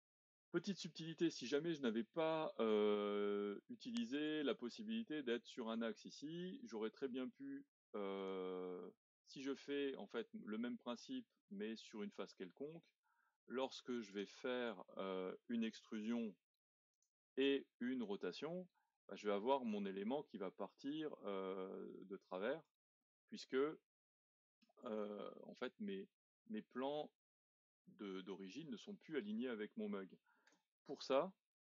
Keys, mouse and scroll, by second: 1.2-1.6 scroll up 1, 1.6-8.2 middle drag, 8.2 click, 8.7 middle click, 9.4-10.0 scroll up 1, 10.0-13.0 middle drag, 14.1-16.2 drag, 16.2 e, 18.0 click, 23.0-28.0 middle drag, 28.7-29.8 middle drag, 30.5 z.